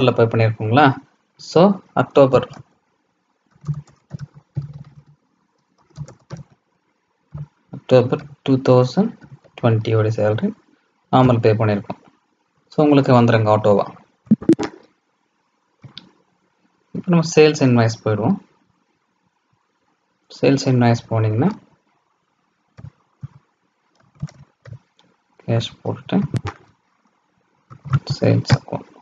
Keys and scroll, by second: 26.1 ctrl+a.